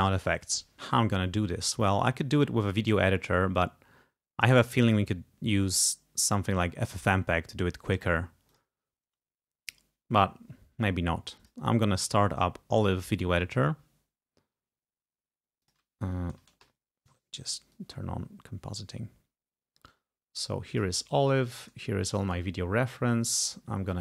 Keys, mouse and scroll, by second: 4.9 click, 8.6 click, 11.5 click, 15.8 click, 16.7 alt+shift+F12, 16.8 alt+shift+F12, 17.8-21.2 drag, 22.4 right click, 23.5 click.